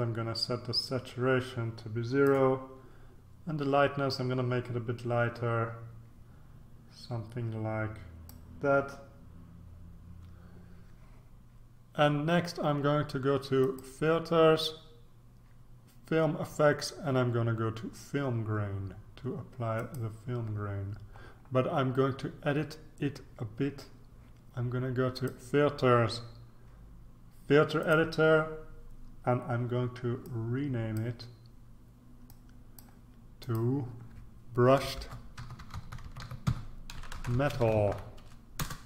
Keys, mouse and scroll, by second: 4.1-8.8 drag, 13.6 click, 19.7 click, 25.1 click, 27.8 click, 30.2 click, 32.3-33.3 drag, 34.0 click, 34.6-38.3 typing, 38.6 Return.